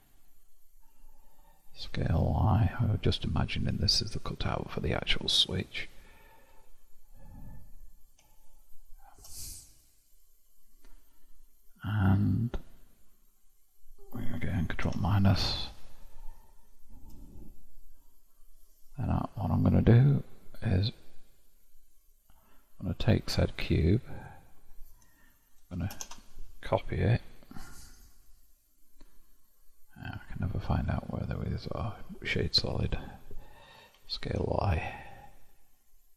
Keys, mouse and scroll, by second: 4.5-7.3 middle drag, 8.4 shift+click, 9.9-12.6 middle drag, 15.0 ctrl+KP_Subtract, 18.9-21.7 scroll down 1, 22.0 click, 23.0 click, 23.7 click, 25.9 shift+d, 27.3 q.